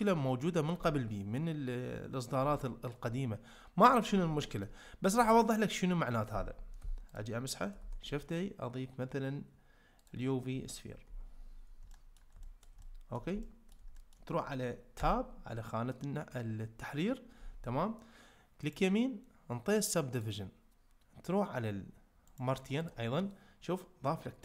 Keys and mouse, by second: 0.0-2.4 drag, 2.6 ctrl+middle click, 4.4 ctrl+middle click, 7.8 shift+a, 11.9 shift+middle drag, 12.4 ctrl+middle click, 12.8-13.2 shift+middle drag, 13.4-13.8 ctrl+middle drag, 14.0 shift+middle click, 15.0 Tab, 18.8-20.2 right drag, 22.3 right click.